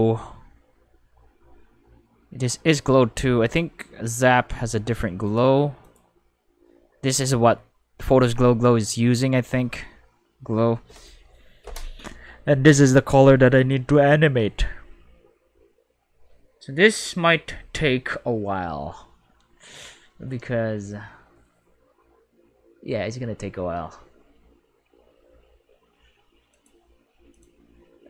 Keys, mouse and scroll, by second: 3.4 right click, 5.3 click, 5.8 click, 9.8-11.3 middle drag, 26.5 click, 27.3 click.